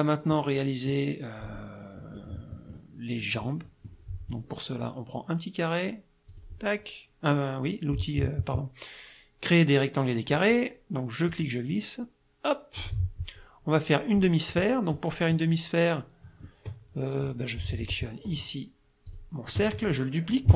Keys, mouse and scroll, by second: 0.3 middle click, 2.2 middle click, 3.5 middle click, 6.3 click, 11.3-13.0 drag, 14.2 middle click, 16.5-17.5 middle drag, 18.3 click, 19.1 click, 19.5 click.